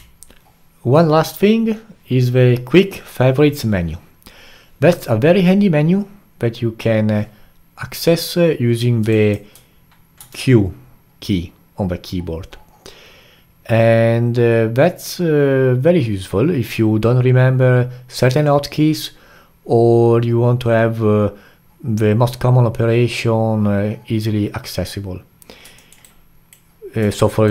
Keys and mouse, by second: 9.1 click, 10.2 q, 25.8 alt+middle drag, 26.0-27.5 alt+right drag.